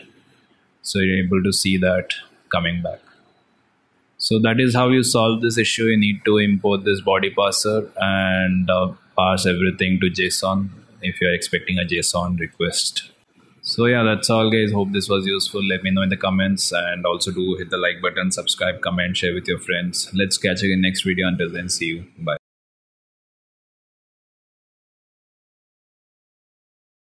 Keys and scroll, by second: 4.7 alt+Tab.